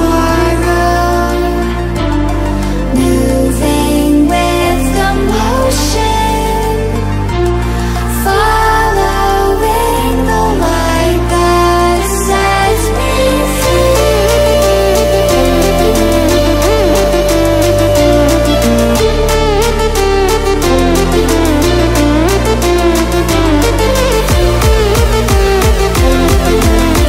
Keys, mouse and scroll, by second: 1.2-6.3 drag, 6.3 ctrl+alt+scroll up 1, 7.5 ctrl+alt+scroll down 1, 8.1 ctrl+alt+scroll down 1, 8.5 ctrl+alt+scroll up 1, 10.3 ctrl+alt+scroll down 1, 12.5 click, 16.6-18.1 drag, 18.1 Delete, 19.6 click, 19.7 Delete, 19.8 click, 19.8 Delete, 19.9 click, 20.3 Delete, 20.7 ctrl+z, 20.8 click, 21.2 right click, 21.4 click, 21.8 End, 22.0 Delete, 22.1 click, 22.2 Delete, 22.3 click, 22.4 Delete, 22.6 click, 22.6 Delete, 22.8 click, 22.8 Delete, 22.9 click, 22.9 Delete, 23.0 click, 23.1 Delete, 23.2 click, 23.2 Delete, 23.4 click, 23.5 Delete, 23.7 click, 23.7 Delete, 23.9 click, 23.9 Delete, 24.1 click, 24.2 Delete, 24.3 click, 24.5 Delete, 24.6 click, 24.7 Delete, 24.8 click, 24.8 Delete, 24.9 click, 25.0 Delete, 25.2 click, 25.2 Delete, 25.3 click, 25.5 Delete, 25.6 click, 25.6 Delete, 25.7 click, 25.8 Delete, 25.9 click, 25.9 Delete, 26.1 click, 26.1 Delete, 26.2 click, 26.3 Delete, 26.4 click, 26.5 Delete, 26.7 click, 26.8 Delete, 26.9 click, 27.0 Delete.